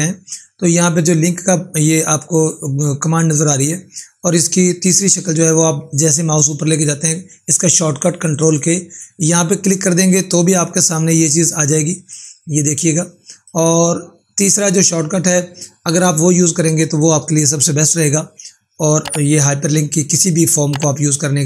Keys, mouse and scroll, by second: 10.0 ctrl+Num_Lock, 11.4 ctrl+4, 12.4 click.